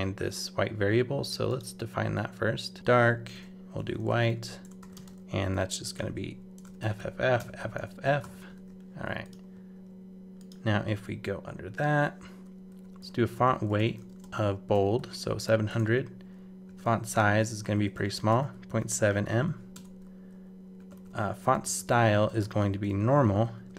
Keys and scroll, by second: 8.0 super+Return, 8.5 super+s.